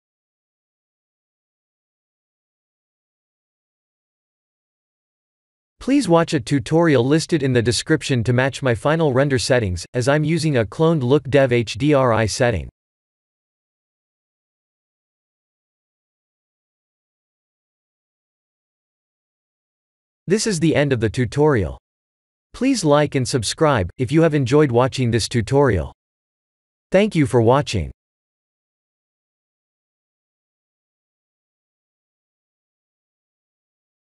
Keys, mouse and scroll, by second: 1.8 click, 4.6 click, 5.2 middle click, 8.0 KP_0, 9.1-10.8 scroll down 1, 10.8 scroll down 1, 12.5 click, 13.1 click, 14.9 click, 18.5 click, 19.2 ctrl+s.